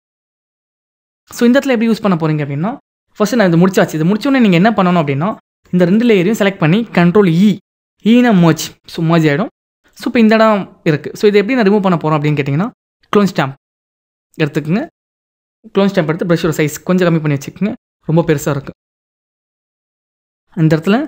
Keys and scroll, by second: 0.2 ctrl+=, 8.0 ctrl+e.